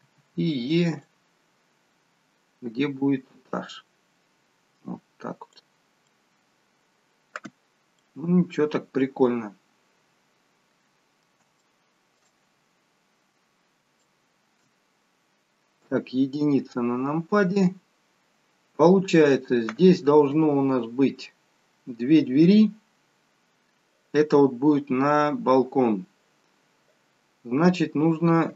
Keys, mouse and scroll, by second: 0.0 e, 1.1 click, 6.3 middle click, 7.6-8.2 scroll up 4, 8.0 middle click, 11.6 shift+middle click, 12.4 scroll down 1, 14.0 shift+middle click, 15.8 KP_1, 17.0-17.4 scroll up 2.